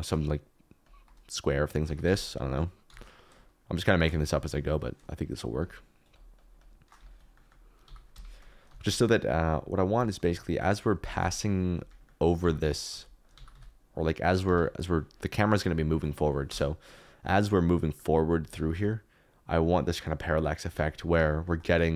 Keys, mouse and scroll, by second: 2.0 alt+d, 2.0 t, 2.8 y, 4.3 middle click, 5.3 shift+click, 6.1 shift+click, 7.1 ctrl+click, 7.8 g, 8.1 Escape, 8.6 g, 8.8 y, 10.1 g, 10.3 y, 11.0 g, 11.1 z, 11.7 Escape, 12.3-13.5 typing, 14.4 Escape, 15.5 middle click, 16.4 KP_0, 17.6 KP_Decimal, 17.8 middle click, 18.5 g, 18.7 y, 20.6 Escape, 21.4 shift+right click.